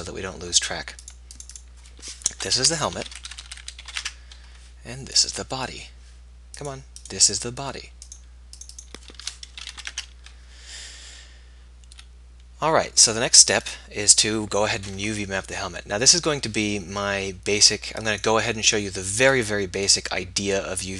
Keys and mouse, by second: 4.0 BackSpace, 15.0 Tab.